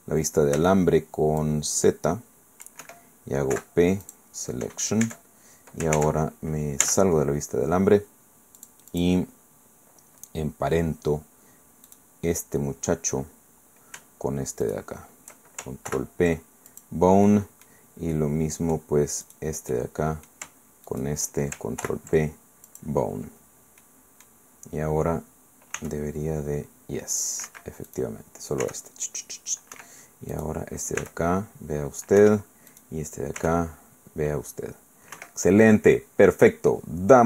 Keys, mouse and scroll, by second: 0.6 c, 1.4-2.8 drag, 2.8 Escape, 3.5 p, 4.0 [, 4.0 click, 4.4-5.3 scroll down 2, 5.0 Tab, 5.9 ctrl+Tab, 6.8 z, 8.6 click, 9.7-10.2 scroll up 2, 10.2-11.0 scroll down 2, 11.9 right click, 13.3-14.2 scroll down 3, 14.6 shift+middle click, 14.9 shift+right click, 14.9-16.7 shift+middle drag, 15.9 ctrl+p, 16.7 ctrl+click, 17.3 click, 17.8 middle click, 18.1 middle click, 19.2 right click, 19.7 middle click, 20.9 shift+right click, 21.8 ctrl+p, 22.7 click, 23.2-24.4 scroll down 1, 23.8 middle click, 24.6-25.1 scroll up 1, 25.8 r, 27.5 Escape, 27.9 click, 28.6 r, 29.7 Escape, 30.3 click, 31.0 r, 32.2 Escape, 32.7 click, 33.4 r, 35.1 Escape, 35.9-36.6 scroll down 2, 36.7 click.